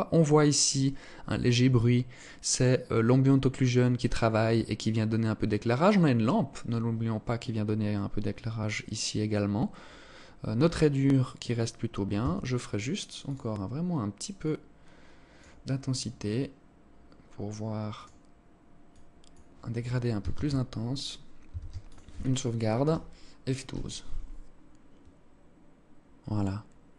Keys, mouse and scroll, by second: 11.6 Escape, 12.7 click, 17.4 click, 21.0 ctrl+s.